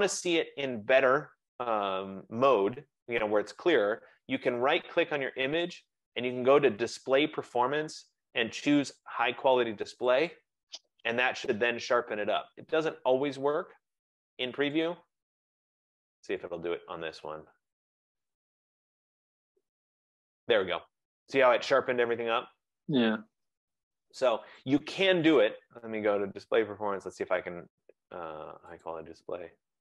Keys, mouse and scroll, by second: 3.3 F15, 4.8 right click, 10.4 click, 14.9 click, 15.9 click, 16.7 right click, 24.6 click, 25.5 right click, 28.9 click.